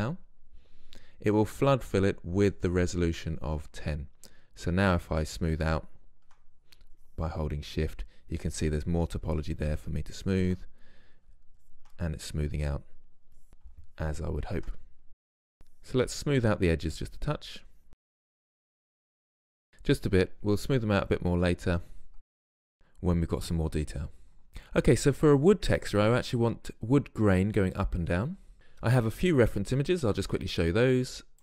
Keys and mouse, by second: 4.9-14.9 drag, 14.9 middle click, 15.5-17.0 drag, 17.0 middle click, 17.3-20.0 drag, 20.0 middle drag, 20.2-22.4 drag, 22.5 drag.